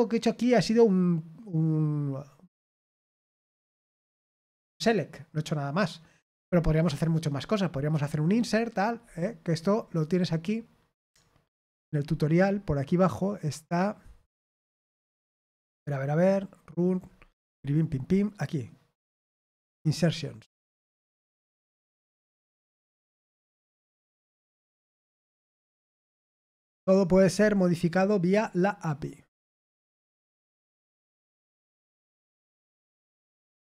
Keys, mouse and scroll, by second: 9.9 click, 11.5 click, 12.4-12.8 scroll down 2, 14.1-14.5 scroll down 1, 14.6-15.8 scroll up 2, 15.8-16.6 scroll up 1, 17.0-18.0 scroll up 3, 19.5 click, 22.9-23.5 scroll up 4, 28.2-28.7 scroll down 1, 33.2-33.5 scroll down 2.